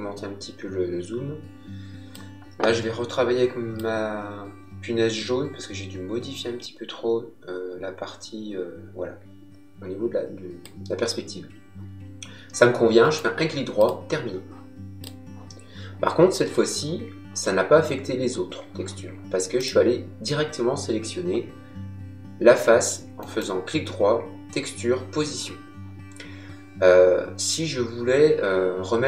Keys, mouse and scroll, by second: 3.7 click, 13.0 right click, 13.7 click, 19.5 click, 23.1 right click.